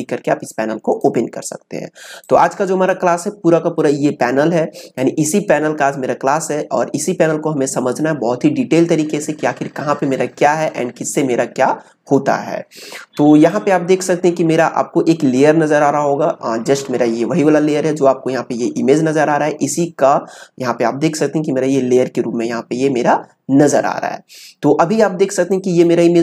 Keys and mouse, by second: 0.7-7.8 drag, 13.5-16.3 drag, 25.5-26.2 drag.